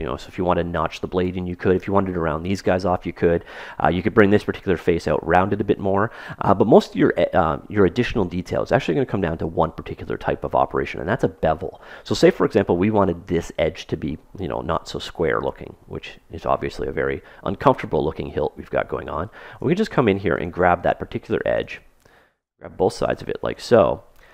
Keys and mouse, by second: 2.9-4.7 middle drag, 10.4-13.1 middle drag, 14.6-16.4 middle drag, 19.2 ctrl+Tab, 20.5-22.8 drag, 22.8 right click.